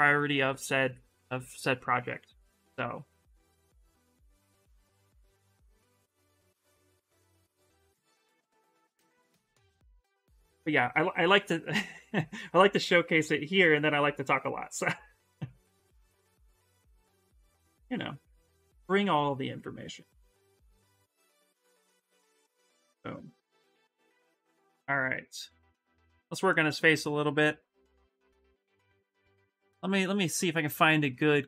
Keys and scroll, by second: 11.7 s, 28.3 Return, 28.9 Return.